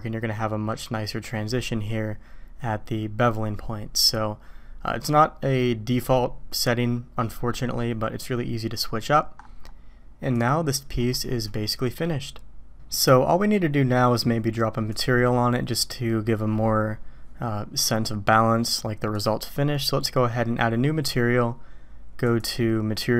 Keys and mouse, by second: 10.3 click, 12.0-12.9 middle drag, 12.6 ctrl+s, 13.1-13.6 middle drag, 14.9 click, 19.1 click, 22.7-23.1 drag.